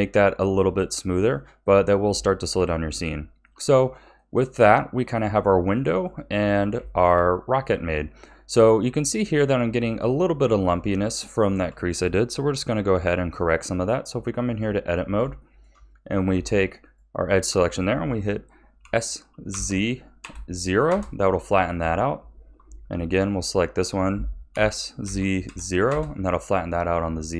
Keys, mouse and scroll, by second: 0.9-2.8 middle drag, 2.8 scroll down 3, 3.4-12.6 middle drag, 12.6 KP_1, 13.2 click, 13.9 Tab, 14.9-15.4 scroll up 3, 15.4-16.8 shift+middle drag, 16.8 alt+shift+click, 18.8 s, 21.6 a, 23.3 alt+shift+click, 24.5 s, 27.0-27.3 scroll up 1.